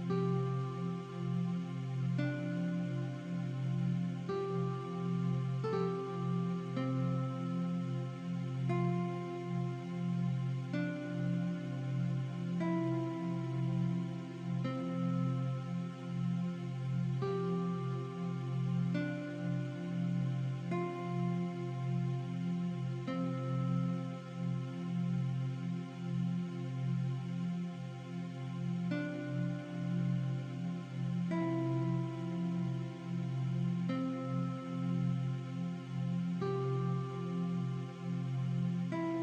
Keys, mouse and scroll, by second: 0.4 click, 1.0 scroll down 1, 1.8 scroll up 1, 2.1 click, 2.7 scroll up 1, 3.0 click, 4.6 ], 4.7 click, 5.8 scroll up 1, 6.3 alt+shift+scroll up 1, 8.3 click, 9.7 v, 10.5 click, 12.1 click, 14.3 click, 17.6 z, 17.6 click, 18.1 shift+click, 18.4 click, 20.3 click, 21.5 2, 21.9 click, 22.3 shift+click, 22.9 click, 25.1 click, 25.7 click, 26.4 ctrl+z, 26.7 click, 28.8 click, 30.1 click, 31.2 click, 35.9 click, 37.3 shift+click.